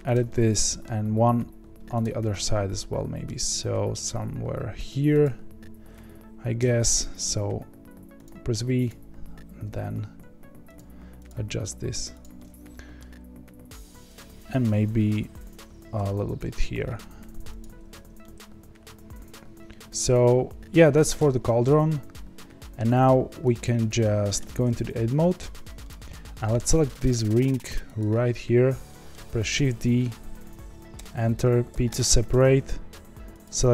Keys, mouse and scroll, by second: 0.2-2.0 middle drag, 2.0 click, 2.2-5.2 middle drag, 5.2 click, 6.5 v, 8.8 click, 9.6 g, 11.2 click, 11.5 g, 12.3-14.1 middle drag, 14.1 click, 15.9 v, 17.8 Tab, 18.2-20.7 middle drag, 20.7 scroll down 1, 20.9-23.5 middle drag, 23.5 click, 24.3 Tab, 25.8-26.8 middle drag, 26.8 2, 27.4 click, 28.8 middle click, 29.5 shift+d, 31.9 p, 32.2 Tab, 33.4 click.